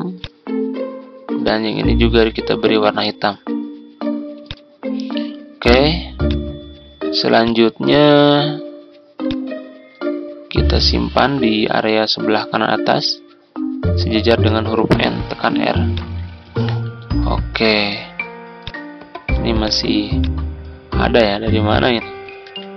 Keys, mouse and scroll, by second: 0.1-10.2 drag, 10.1 scroll, 10.2 scroll down 1, 11.4 click, 12.8 ctrl+g, 14.4 shift+click, 15.8 click, 16.3 ctrl+scroll down 1, 18.6 click, 22.4 Delete.